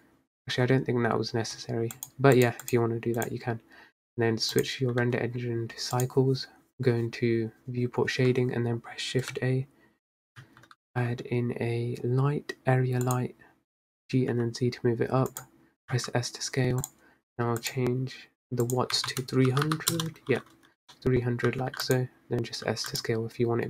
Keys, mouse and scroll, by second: 0.7-2.0 scroll up 6, 3.4-6.2 drag, 8.4-9.6 scroll down 4, 13.2 shift+a, 14.0 g, 16.0 s, 17.8 click, 20.1 0, 21.1-21.7 middle drag, 21.7 s, 22.9 s.